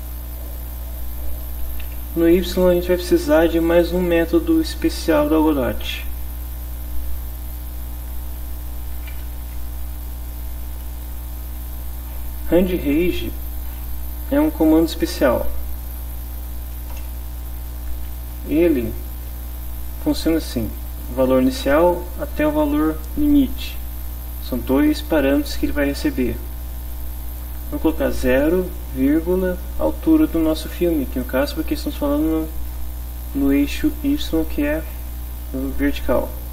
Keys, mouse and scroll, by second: 0.6 click, 1.6 BackSpace, 2.0 ,, 2.6 space, 3.1 BackSpace, 9.0 r, 9.1 a, 9.2 n, 9.4 d, 12.7 Down, 13.1 Up, 17.0 Return, 18.2 shift+9, 28.2 0, 29.1 ..